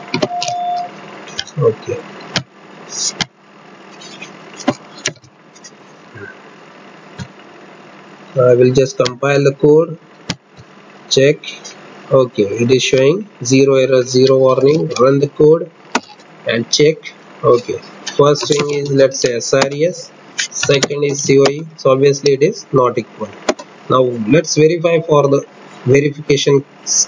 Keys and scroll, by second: 4.4 ctrl+F8, 14.0 alt+F8.